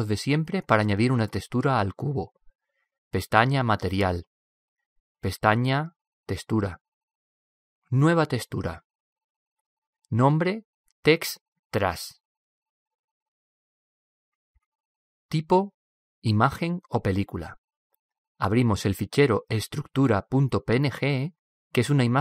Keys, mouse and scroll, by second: 1.0 middle click, 1.7 middle click, 2.5 click, 3.4-4.7 drag, 21.3 click.